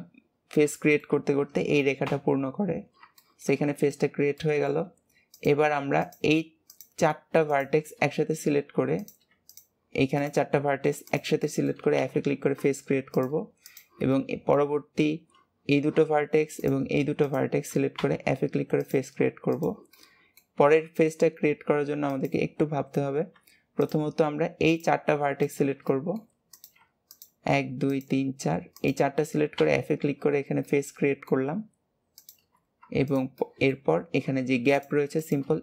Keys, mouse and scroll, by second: 0.6-2.0 shift+middle drag, 2.0 f, 2.6 scroll down 3, 3.0-5.3 shift+middle drag, 5.3 click, 6.0 shift+click, 6.6 shift+click, 7.4 shift+click, 8.0 scroll up 1, 8.9 click, 9.4 shift+click, 10.1 shift+click, 11.0 shift+click, 11.3 shift+middle click, 11.9 f, 13.0 click, 13.6 shift+click, 14.0-16.5 shift+middle drag, 16.5 shift+click, 17.1 shift+click, 18.8 click, 19.4 shift+click, 19.8-22.0 shift+middle drag, 22.0 click, 23.8 shift+click, 24.6 shift+click, 25.4 shift+click, 25.8 middle click, 26.4 click, 27.0 shift+click, 27.8 shift+click, 28.7 shift+click, 29.5 f, 30.6-32.1 middle drag, 32.1 click, 33.4-34.7 shift+middle drag, 34.7 shift+click, 35.1 shift+click.